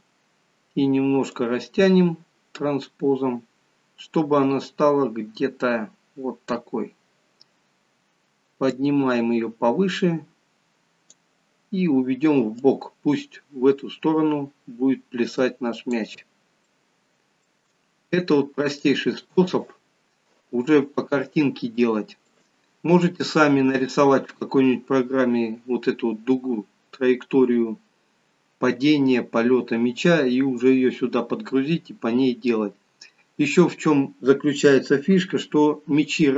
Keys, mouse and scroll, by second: 1.5 click, 7.1-7.6 scroll down 2, 8.9 click, 8.9 scroll down 1, 12.7 click, 16.7 shift+middle click, 17.9 scroll up 3, 18.5 scroll down 1, 18.9 shift+middle click, 22.4 click.